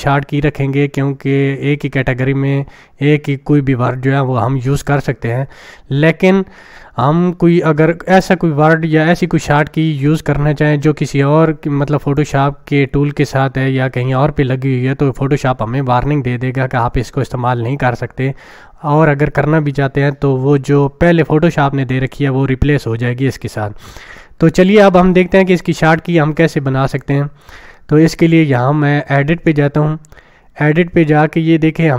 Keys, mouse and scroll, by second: 12.2 click, 26.4-27.0 drag.